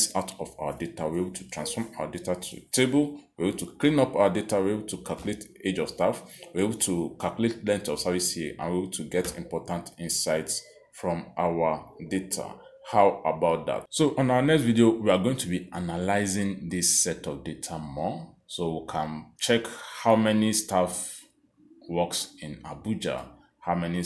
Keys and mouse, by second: 1.2 click, 2.1 click, 21.6 click.